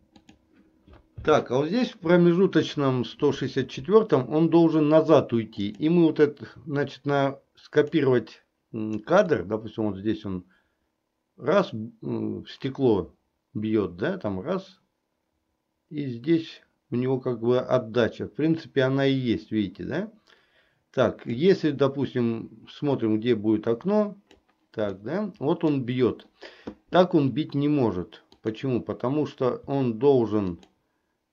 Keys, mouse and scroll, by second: 5.8 click, 7.4 click, 9.5-21.5 drag, 23.1-24.5 drag, 25.1 middle click, 30.7 shift+click.